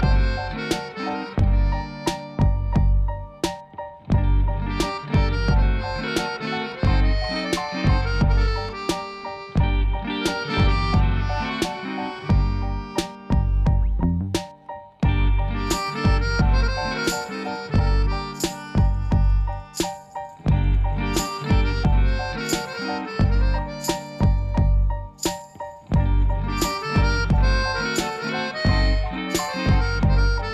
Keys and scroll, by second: 12.5 g, 13.2 z, 21.7 3, 22.4 Tab, 25.7 g, 26.0 z, 28.9 shift+z.